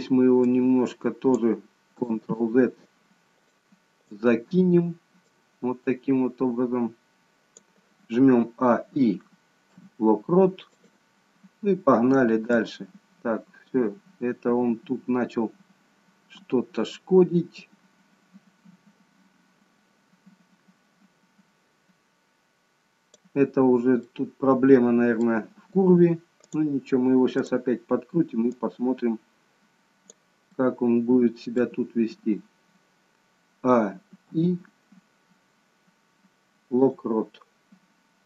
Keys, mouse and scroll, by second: 0.5 click, 2.4 ctrl+z, 3.4 click, 4.1 click, 5.2 click, 8.7-11.0 a, 9.7 i, 12.7 click, 24.1 middle click, 24.1-26.2 scroll up 1, 26.5 click, 27.1 click, 27.4 click, 28.6 click, 30.5 middle click, 34.2 a, 35.7 i.